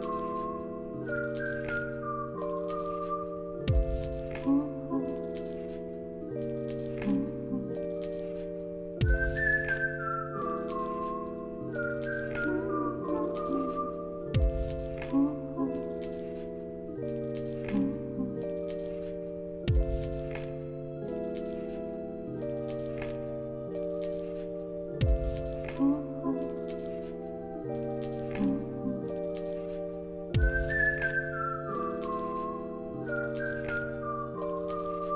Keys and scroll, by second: 0.2 ctrl+v, 0.7 ctrl+s, 1.3 alt+x, 11.9 ctrl+c, 12.1 ctrl+v, 13.0 alt+x, 14.9 z, 18.0-19.0 typing, 22.3-23.2 typing, 23.4 Return, 24.2 x, 25.6-26.6 typing, 27.6 Escape, 29.8 9, 31.6 Escape, 33.8 z.